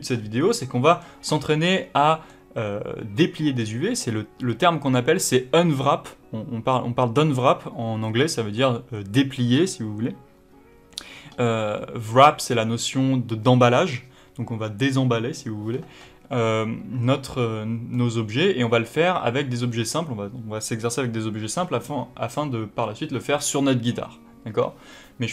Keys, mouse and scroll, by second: 0.5 middle click, 8.0 middle click, 17.9-21.9 middle drag.